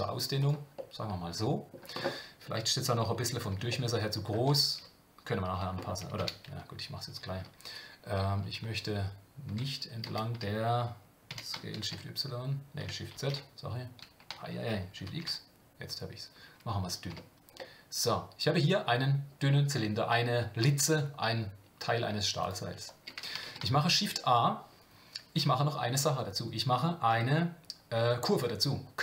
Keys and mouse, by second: 0.8 middle click, 3.7 shift+middle click, 17.1 Tab, 17.6-18.9 middle drag, 23.4 shift+a.